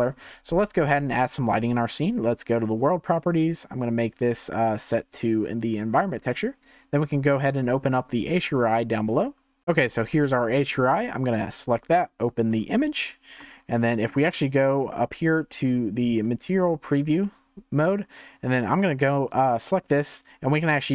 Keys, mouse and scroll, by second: 2.8 click, 4.2-7.3 drag, 7.6-9.6 drag, 13.4-16.4 middle drag, 16.4 click, 19.2-20.9 drag.